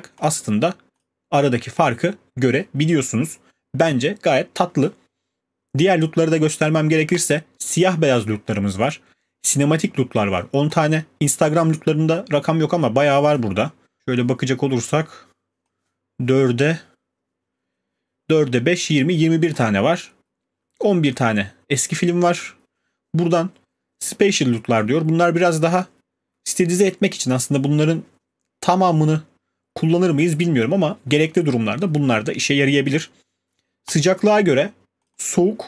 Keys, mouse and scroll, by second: 0.2 click, 1.0 click, 7.2 click, 10.7 click, 11.4 scroll, 12.8 scroll, 14.0 scroll, 17.4 scroll, 19.0 click, 19.6 click, 22.4 click, 32.4 click, 35.0 click, 35.2 click.